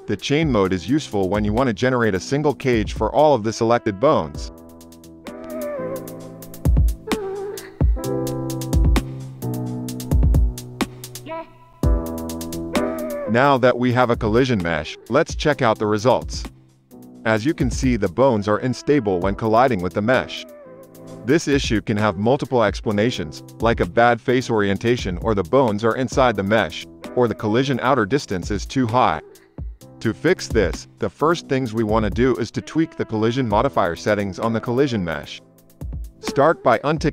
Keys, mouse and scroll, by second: 13.8 space, 19.3 space, 19.4 KP_0, 21.2 click, 21.9 shift+Left, 22.3 space, 26.9 space, 27.5 space, 29.1 space, 29.8 click, 33.7 click, 35.2 shift+Left, 35.8 space, 36.5 space.